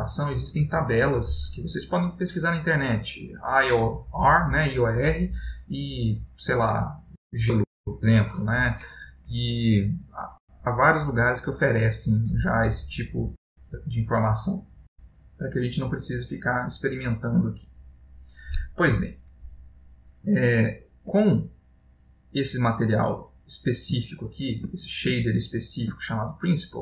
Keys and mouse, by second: 20.6 ctrl+middle click, 21.6 middle click, 22.2 middle click, 23.6 click, 24.2 ctrl+middle click, 25.0 middle click, 25.4 ctrl+middle click.